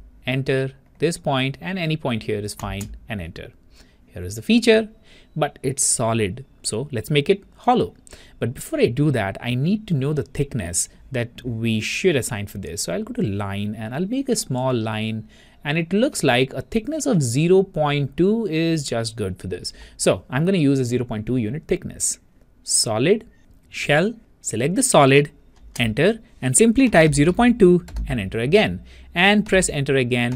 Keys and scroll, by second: 0.2 Return, 3.3 Return, 21.0 typing, 25.9 Return, 27.1 Return, 27.1 typing.